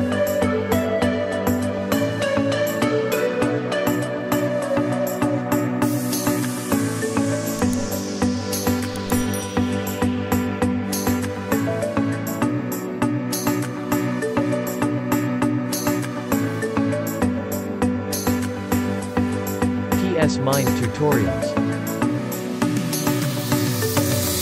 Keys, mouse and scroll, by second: 2.0 space, 2.3 click, 2.6 space, 5.6 click, 6.1 space, 6.2 click, 6.6 space, 8.3 ctrl+j, 9.5 ctrl+shift+a, 11.7 v, 12.4 ctrl+shift+a, 17.7 click, 19.3 q, 22.3 click.